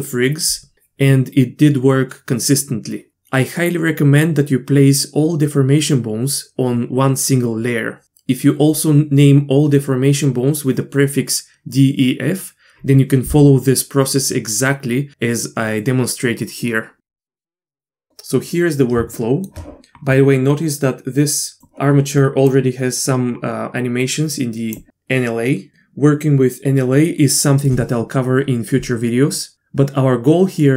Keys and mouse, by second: 17.8-18.5 drag, 19.1 shift+middle click, 21.6-24.8 drag.